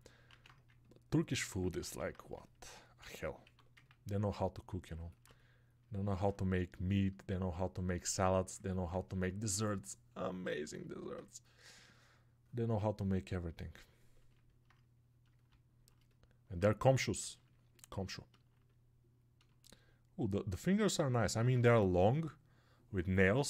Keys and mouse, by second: 4.8-14.4 alt+right drag, 14.4-23.4 alt+drag.